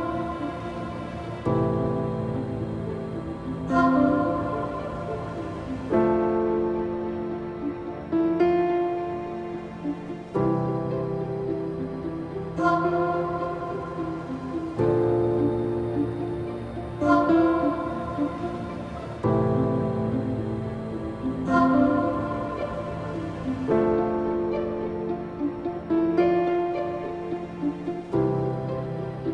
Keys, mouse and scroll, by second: 0.6 space, 0.9 click, 1.7 space, 3.0-10.2 drag, 10.2-12.6 typing, 10.4 click, 11.4 click, 12.0 click, 12.6 click, 14.0-20.5 drag, 20.5 space, 20.8 click, 21.6 space, 21.7 click, 21.8 space, 22.4 scroll down 2, 24.0-29.3 drag.